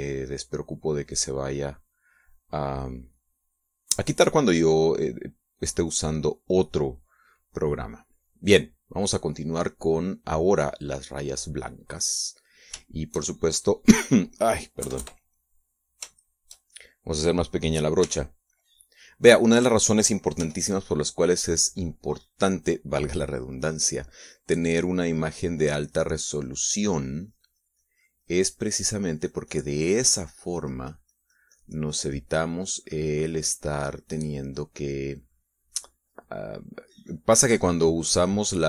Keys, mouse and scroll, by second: 1.5 middle click, 2.4 right click, 4.0 click, 6.9 click, 9.1 middle click, 10.9-12.0 drag, 13.7-15.1 shift+middle drag, 15.1-15.7 scroll up 1, 15.7 KP_Add, 15.7-16.4 scroll up 1, 16.4 middle click, 17.0 shift+middle click, 18.9 f, 19.9 click, 21.2 f, 21.9 click, 26.0 click, 26.4 click.